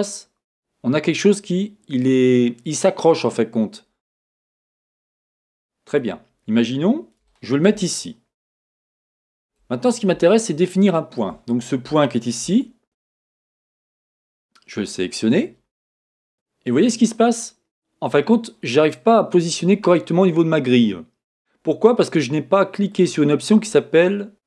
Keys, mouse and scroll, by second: 6.0 click, 6.5 click, 7.3-12.6 shift+middle drag, 7.9 scroll up 2, 9.1 Tab, 9.8 scroll up 2, 11.5-12.0 scroll up 2, 12.6-13.4 scroll up 1, 13.4 click, 15.3 click, 23.0 click, 24.3 click.